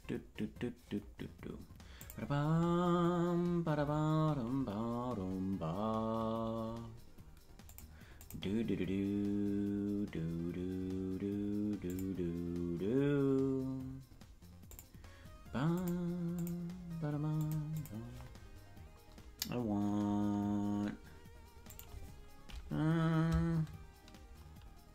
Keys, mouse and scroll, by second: 1.9 click, 7.6 click, 8.1-12.0 drag, 14.6-15.8 drag, 16.3-17.4 drag, 17.7 click.